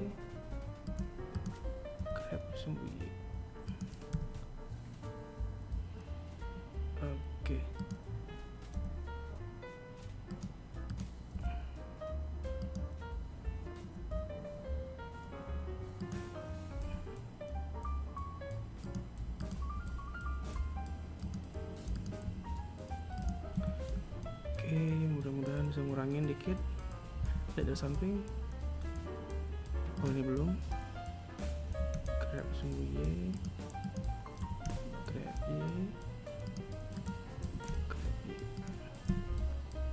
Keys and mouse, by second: 0.9 right click, 1.5 g, 3.7 KP_7, 7.3 right click, 8.3 g, 10.4 right click, 10.9 g, 15.2 right click, 16.1 g, 18.5 right click, 18.9 g, 21.1 right click, 21.4 g, 22.7 a, 26.4 KP_1, 26.8 KP_3, 29.1 right click, 30.8 g, 33.0 right click, 33.6 g, 36.2 right click, 36.6 g, 38.2 KP_3, 39.6 g.